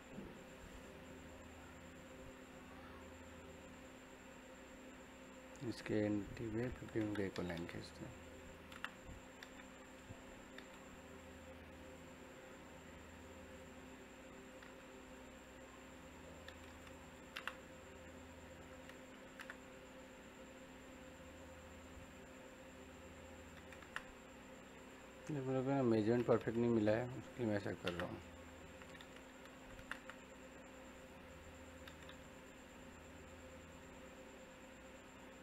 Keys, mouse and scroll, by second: 8.2 click, 8.4 e, 8.6 space, 9.1 middle click, 9.8 click, 9.8 typing, 16.1 middle click, 16.8 click, 17.1 e, 17.2 space, 19.2 l, 19.3 space, 21.9 click, 23.8 space, 24.8 click, 26.5 middle click, 27.2 click, 27.6 typing, 29.2-29.8 typing, 30.9 click, 32.5 click.